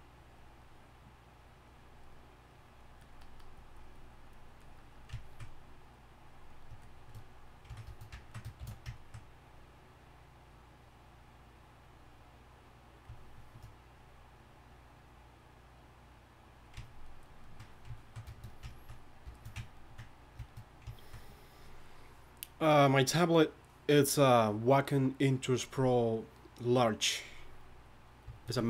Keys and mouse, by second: 8.6 shift+s, 13.2-16.9 middle drag.